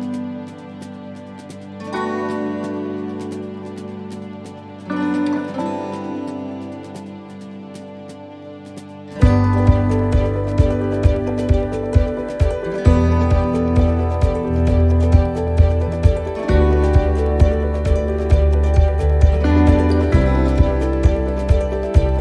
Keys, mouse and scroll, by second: 0.0 click, 2.2 click, 4.2 click, 4.2 shift+middle click, 6.8 right click, 7.5 shift+right click, 8.7 s, 12.7 right click, 13.2 shift+right click, 14.1 click, 16.7 right click, 17.6 click, 20.4 shift+middle click, 21.8 right click.